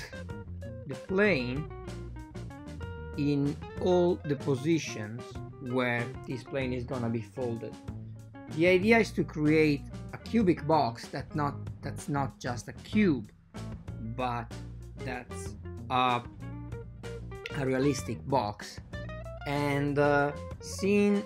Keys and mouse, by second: 2.4 ctrl+r, 3.9 ctrl+r, 9.7 middle click, 11.0 click, 12.0-14.0 shift+drag, 14.6 super+z, 16.0 alt+shift+click, 16.6-19.0 shift+right drag, 19.7 x.